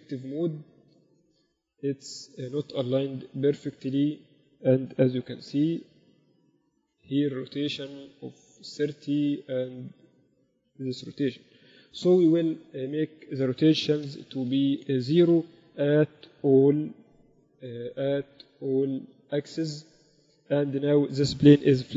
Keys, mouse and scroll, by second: 3.7-6.0 typing, 7.2-8.8 drag, 10.6-15.8 drag, 16.0 n, 17.1 KP_8, 17.3 KP_8, 17.6 KP_6.